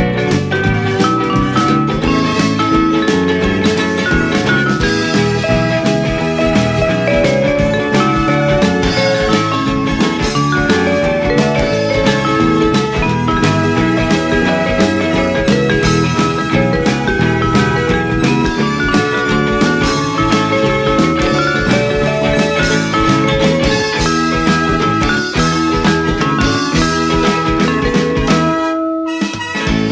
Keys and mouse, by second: 0.3 g, 0.7 y, 1.7 click, 2.6 g, 3.2 z, 6.2 click, 7.1 shift+click, 8.4 click, 9.1 g, 9.5 x, 11.5 click, 11.6 middle click, 13.0 middle click, 14.7 g, 14.9 x, 15.6 click, 16.0 a, 16.9 g, 17.2 z, 18.8 click, 19.4 middle click, 20.0 ctrl+r, 20.3 click, 21.0 right click, 22.1 KP_3, 23.0 g, 25.8 click, 26.7 middle click, 27.1 ctrl+b.